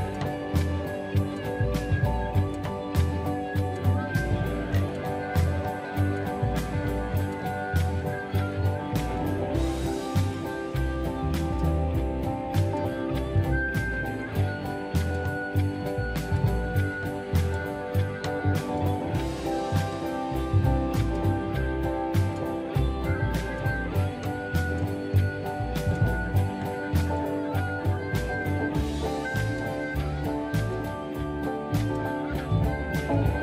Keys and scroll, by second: 0.1-2.2 typing, 2.3 Escape, 6.2 m, 14.1 space, 16.0 m, 22.8 space.